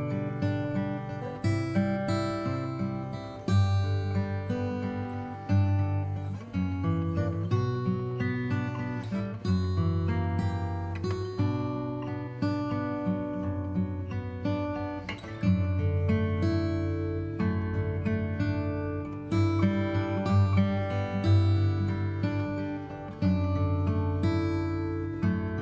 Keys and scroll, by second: 14.2 ctrl+i, 14.8 b, 15.4 Return, 15.5 b, 16.3 alt+x, 18.9 alt+space.